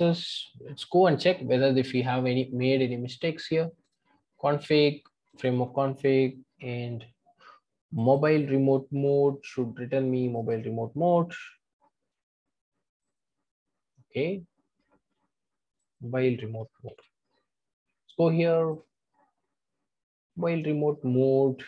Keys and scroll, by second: 16.8 super+c.